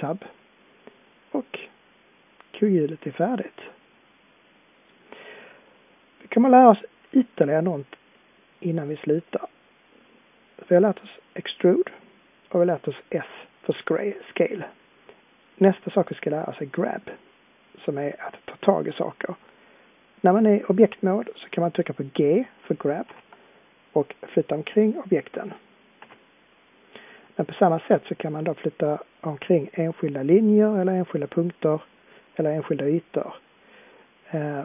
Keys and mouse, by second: 2.0-4.6 middle drag, 8.1-8.5 middle drag, 8.7-9.9 middle drag, 23.0 g, 25.4 click, 26.1 g.